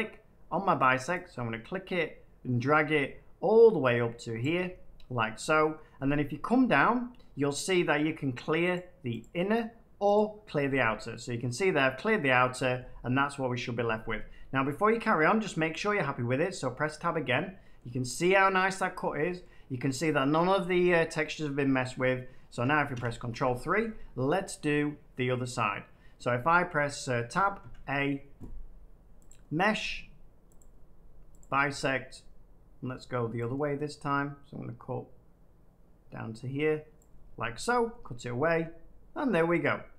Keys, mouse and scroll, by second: 4.3 click, 8.7 click, 9.3-11.0 drag, 15.1 middle click, 15.4 Tab, 16.7-18.6 middle drag, 19.3 middle click, 19.7 scroll up 1, 21.1 scroll down 2, 21.6 shift+middle click, 22.5 shift+middle click, 22.9 ctrl+3, 24.5-25.5 shift+middle drag, 27.1 Tab, 27.5 a, 29.2 click, 30.5 click, 31.3 click, 36.9-37.9 drag.